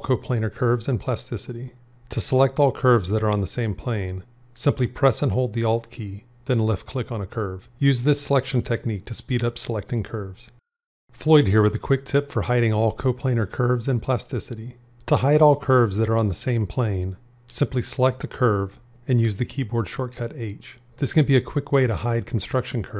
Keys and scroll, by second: 19.5 h.